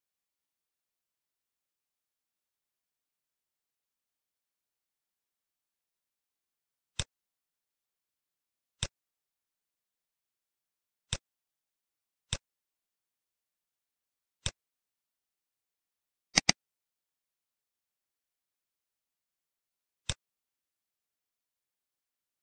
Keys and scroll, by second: 18.1 ctrl+v.